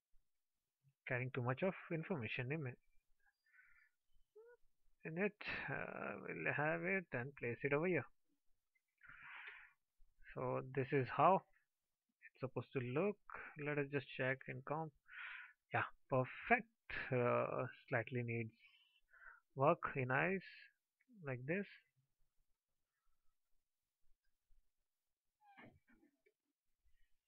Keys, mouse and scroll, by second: 1.9 alt+click, 19.3 alt+click.